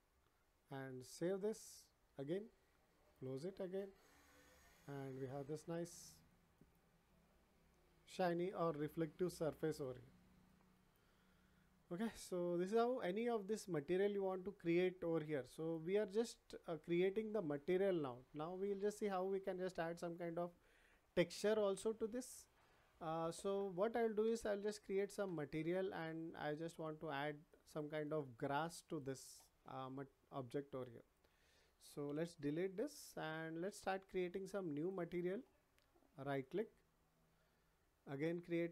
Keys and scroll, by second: 32.1 Delete.